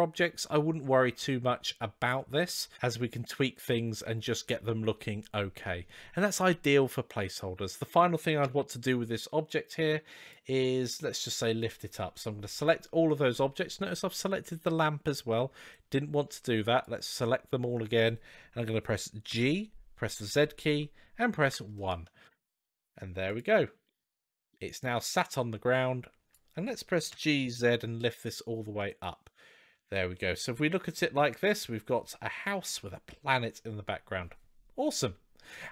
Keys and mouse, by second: 8.2 KP_3, 9.4-10.2 drag, 12.2-13.0 shift+middle drag, 15.6-16.8 drag, 19.1 g, 23.7-24.3 middle drag, 25.5-26.2 drag, 26.9 g, 30.0-31.8 middle drag.